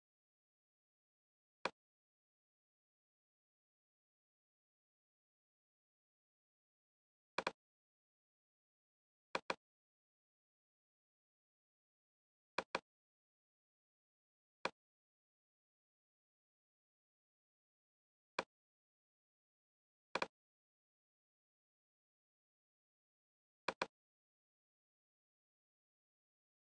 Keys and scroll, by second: 3.6 super+c.